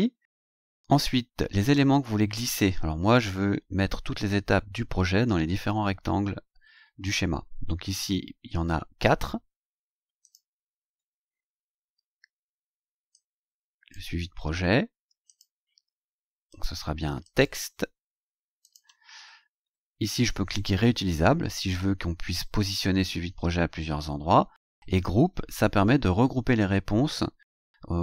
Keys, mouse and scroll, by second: 1.6 click, 3.1-3.4 scroll up 2, 7.5-7.8 scroll down 2, 8.0 scroll down 2, 10.2 click, 13.1 click, 14.5 ctrl+c, 15.3 click, 16.5 click, 17.2 click, 17.8-18.1 scroll down 2, 18.6 ctrl+click, 18.8 ctrl+v, 19.3-19.6 ctrl+scroll up 3.